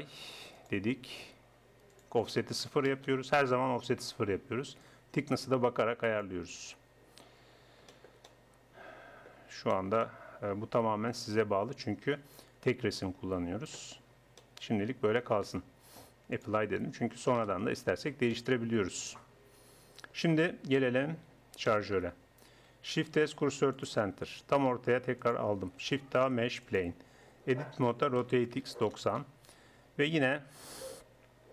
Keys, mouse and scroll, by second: 2.0-3.8 drag, 4.8-6.6 drag, 6.6-9.9 middle drag, 9.9 click, 10.5-12.4 middle drag, 12.4-14.0 drag, 14.0 middle click, 14.2 Tab, 15.4 Tab, 17.4 KP_1, 23.0 shift+s, 26.0 shift+a, 27.2 Tab, 27.8 r.